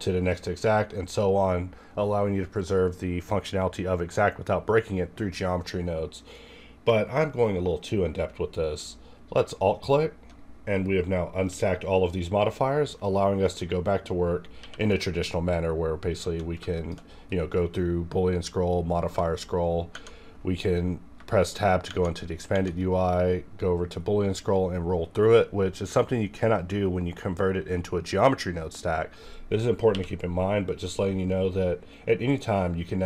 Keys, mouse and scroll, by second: 9.4 alt+click, 9.4-10.8 alt+drag, 10.8 scroll down 2, 11.8 scroll up 1, 14.6 q, 16.7 shift+click, 16.8 shift+click, 17.3-17.6 scroll up 2, 18.7-19.9 scroll up 2, 19.9 Tab, 21.9 Tab, 21.9 shift+Right, 23.5-24.1 scroll up 1, 25.0-25.4 scroll down 1, 25.9 scroll up 1, 26.6-27.2 scroll up 1, 28.6-29.9 right drag, 29.9 q.